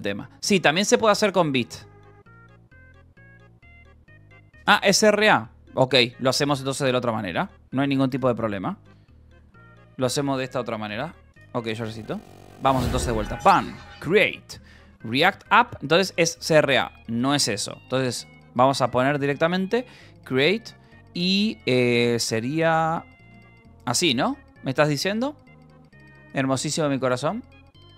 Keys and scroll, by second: 1.9 ctrl+=, 8.5-9.6 typing, 12.8-16.1 typing, 17.4 BackSpace, 21.7-23.5 typing.